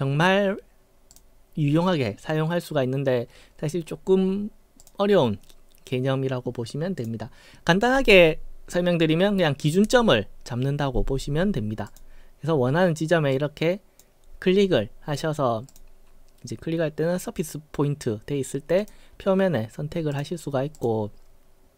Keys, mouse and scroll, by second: 1.1 click, 7.0 click, 11.8 click, 13.3 click, 15.7 click, 18.8 click, 20.1 click, 20.8 click.